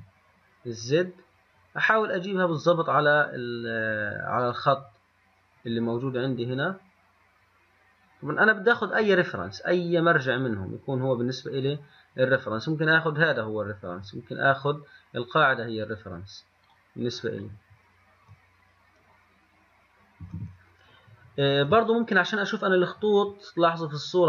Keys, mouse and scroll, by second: 17.3 click, 20.4 click.